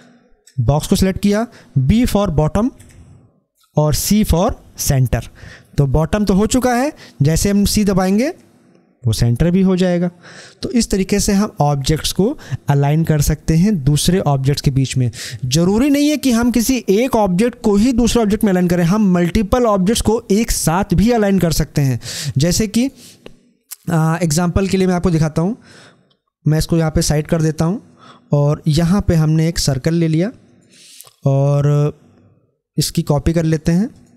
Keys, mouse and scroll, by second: 8.0 b, 22.7-31.5 drag, 31.5 click.